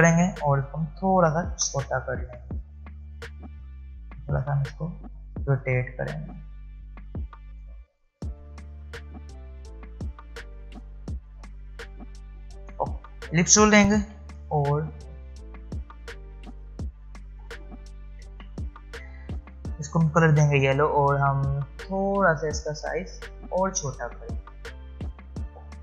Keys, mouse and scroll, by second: 0.3 alt+shift+click, 2.0 alt+scroll down 1, 2.9-3.2 alt+scroll up 1, 3.9 click, 6.4-7.8 drag, 9.8 click, 12.1-12.7 alt+scroll down 1, 12.9 space, 14.0 l, 16.2-16.5 alt+scroll up 1, 18.8-19.7 alt+scroll up 1, 21.9-23.5 alt+shift+drag, 24.1-24.6 alt+scroll down 1, 25.4-25.8 alt+scroll up 1.